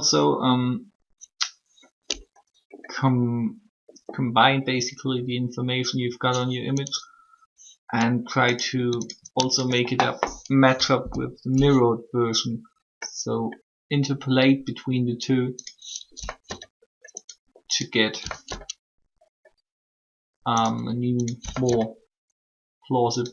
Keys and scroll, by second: 11.0 shift+o, 16.2 s, 18.2 s, 21.4 s.